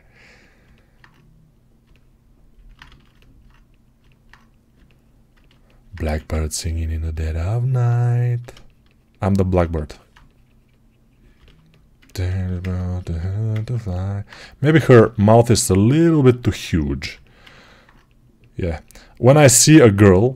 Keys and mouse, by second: 1.7-3.3 alt+right drag, 2.7 ctrl+z, 3.3 click, 3.9 right click, 4.0 alt+click, 4.1 right click, 5.9 1, 9.5-15.3 alt+shift+right drag, 14.6 g, 15.3-17.0 drag.